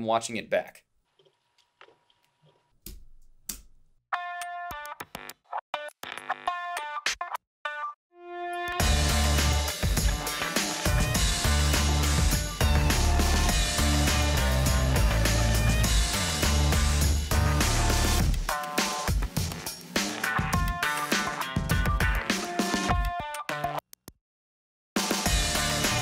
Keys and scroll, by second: 2.9 Home, 3.5 space.